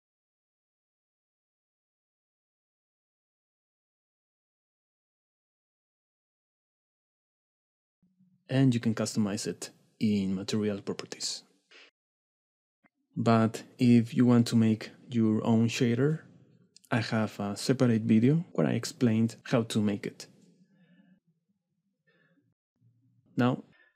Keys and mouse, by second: 0.0 s, 0.4 middle click, 0.9 middle click, 1.2 shift+middle click, 1.7 click, 3.0 click, 3.2 s, 3.8 click, 4.7 click, 9.4 click, 10.8 click, 12.5-14.7 drag, 18.7 middle click, 18.8 middle click, 21.8 KP_Divide, 22.4 middle click, 23.5-23.9 middle drag.